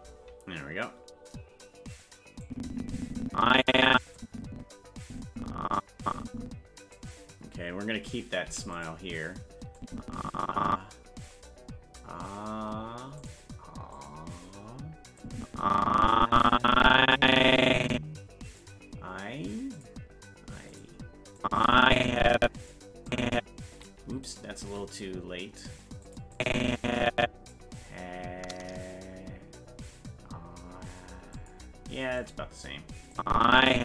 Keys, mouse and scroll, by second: 2.4-3.9 drag, 4.2-7.0 drag, 8.5 i, 9.8-12.0 drag, 13.2 click, 13.9 click, 15.2-18.6 drag, 19.8 click, 20.7 click, 21.4-22.7 drag, 23.1 click, 24.3 right click, 24.6 g, 26.4-27.5 drag, 31.4 click, 32.2 click, 33.1-33.8 drag.